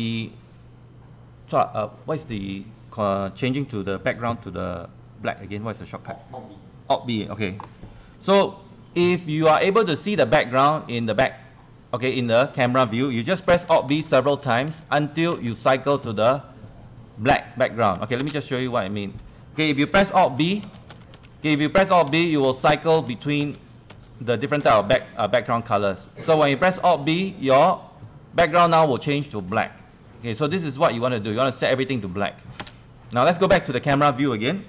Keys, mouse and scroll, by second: 13.9 alt+b, 14.0 alt+b, 14.5 alt+b, 14.6 alt+b, 15.3 alt+b, 15.4 alt+b, 18.9 space, 20.3 alt+b, 20.7 alt+b, 20.9 alt+b, 21.2 alt+b, 21.3 alt+b, 21.6 alt+b, 21.8 alt+b, 22.1 alt+b, 22.5 alt+b, 23.0 alt+b, 23.4 alt+b, 23.9 alt+b, 24.7 alt+b, 31.6 click.